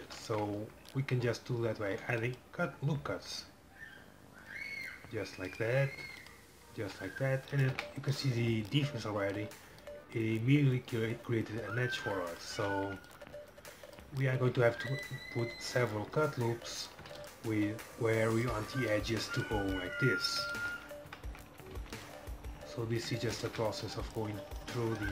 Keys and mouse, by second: 1.9 ctrl+r, 6.0 ctrl+r, 7.8 Tab, 12.7 Tab, 14.7 ctrl+r, 17.2 ctrl+r, 18.6 Tab, 21.2 Tab, 21.8 ctrl+r, 23.6 Tab.